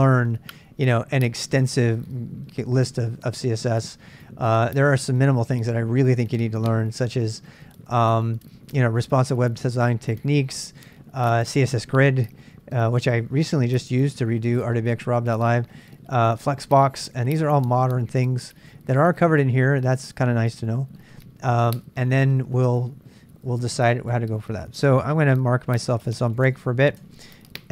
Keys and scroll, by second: 26.3 Tab.